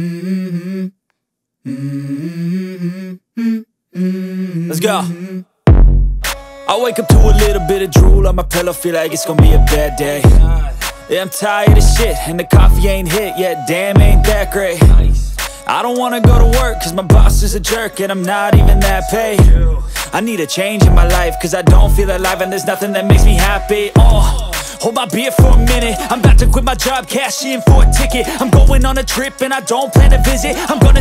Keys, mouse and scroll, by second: 1.3 click, 1.8 click, 2.2-2.9 middle drag, 3.3 shift+middle click, 4.4 s, 5.5 click, 5.9 middle click, 7.3 g, 7.7 z, 9.4 click, 9.9 middle click, 10.5 s, 10.9 x, 12.8 click, 13.3-15.5 middle drag, 15.7-16.8 middle drag, 17.2 s, 17.6 x, 18.8 click, 19.3 s, 21.1 click, 21.3-22.9 middle drag, 24.2 scroll up 1, 25.2 middle click, 25.8 s, 27.1 click, 27.5-28.1 middle drag, 29.9-31.0 drag.